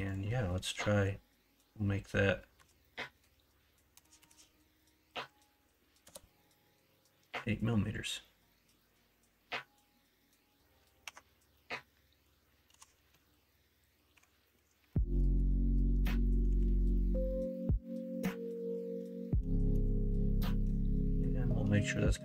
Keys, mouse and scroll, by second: 4.1-7.3 drag, 4.1 KP_0, 11.0 Tab, 11.7 middle click, 12.7 KP_1, 13.0 KP_3, 14.1 r, 16.4 g, 19.9 shift+middle click, 21.9 shift+middle click.